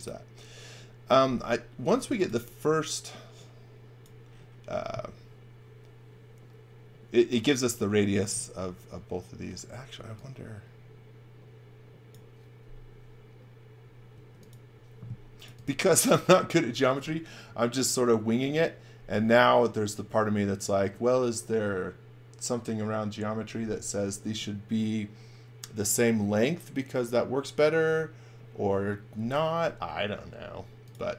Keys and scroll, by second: 1.7-2.7 typing, 9.9 x, 14.1 space.